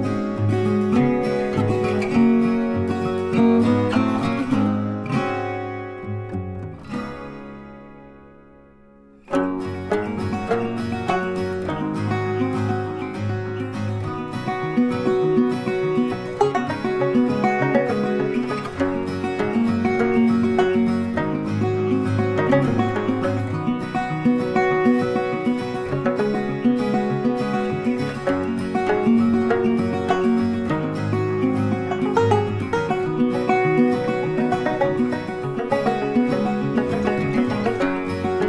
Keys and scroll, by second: 19.9 ctrl+d.